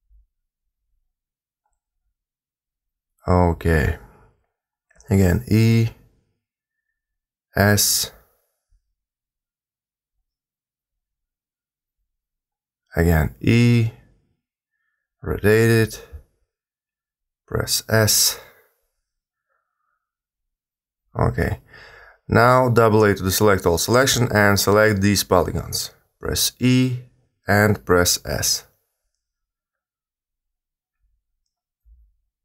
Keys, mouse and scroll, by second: 0.5 s, 3.6 e, 4.9 r, 6.4 s, 8.3 g, 9.4 r, 12.6 e, 14.1 r, 15.4 g, 17.0 s, 22.1 a, 22.2 a, 22.7 click, 25.1 e, 27.6 s, 29.0 g.